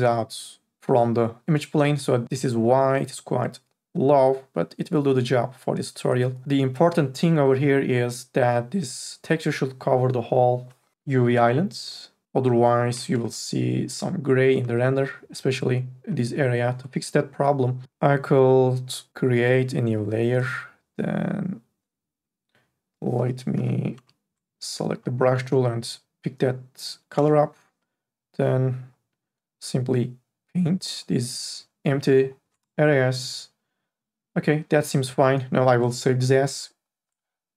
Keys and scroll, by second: 17.8 Delete, 23.8 b, 32.6 space, 34.8 space.